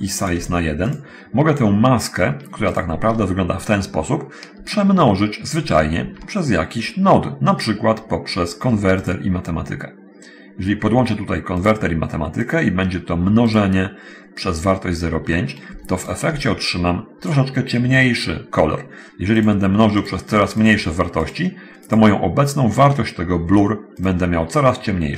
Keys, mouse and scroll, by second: 0.3 click, 0.6 1, 1.1 click, 5.9 shift+a, 8.9 click, 11.9 click, 12.7 click, 13.6 click, 16.3 ctrl+shift+click, 20.3 click, 20.9 click, 21.3 click, 22.1 click, 23.9 click.